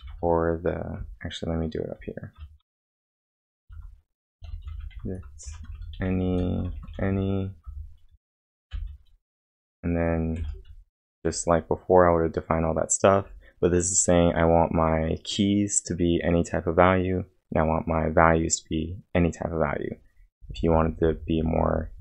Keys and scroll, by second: 0.0 typing, 2.6 ctrl+;, 3.6 ctrl+l, 4.2-8.7 typing, 10.4 shift+(.